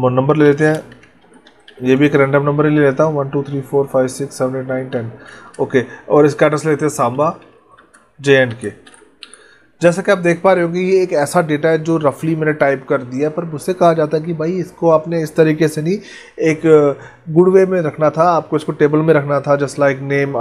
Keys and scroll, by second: 5.2 space, 7.7 space.